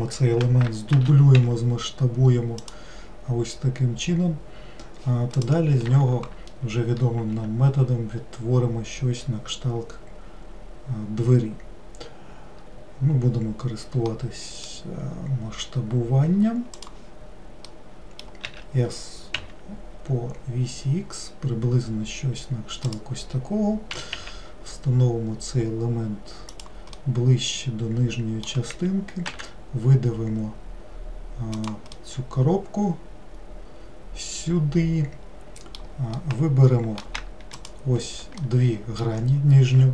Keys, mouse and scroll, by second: 1.0 shift+d, 14.2-17.2 middle drag, 17.7 middle click, 18.5 s, 24.0 g, 27.0-29.3 middle drag, 29.3 e, 32.0-35.0 middle drag, 36.2-37.6 middle drag, 37.6 shift+click, 38.4-39.9 middle drag.